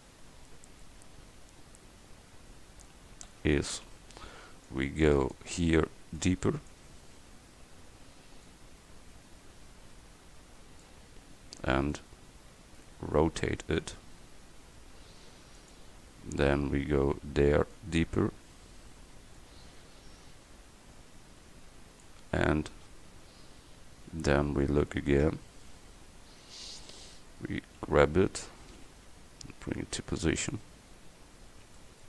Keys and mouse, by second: 1.9-2.9 middle drag, 3.4 a, 4.0 c, 6.2-9.1 drag, 12.1 middle click, 12.5 middle click, 13.9 r, 16.4 a, 17.3 c, 19.4-24.3 drag, 25.4 middle click, 26.2 Tab, 26.6 middle click, 28.9 g, 30.8 middle click, 31.9 middle drag.